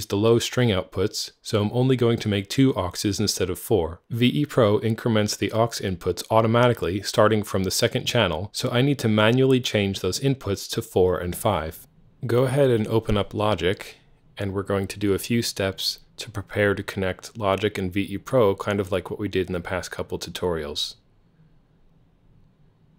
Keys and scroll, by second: 0.9-2.0 typing, 1.0 Tab, 15.3 alt+t, 21.3 alt+t.